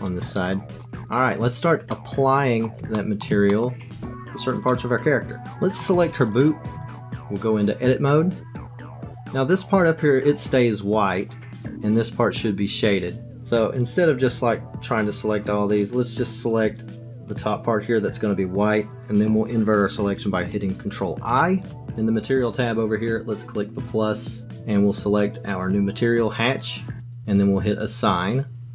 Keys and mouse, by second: 0.8 alt+click, 1.9 middle click, 2.9 shift+middle click, 3.6 alt+click, 4.8 middle click, 5.4 shift+middle click, 6.2 click, 6.8 Tab, 14.3 click, 15.2 click, 15.7 click, 17.4 click, 17.5 click, 21.3 ctrl+i, 24.0-27.0 drag.